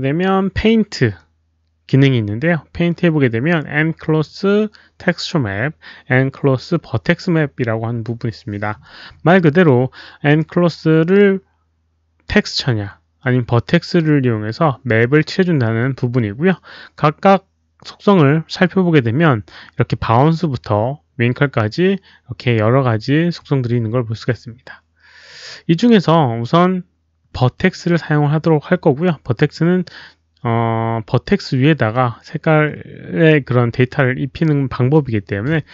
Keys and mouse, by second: 1.8 alt+click, 5.3 alt+click.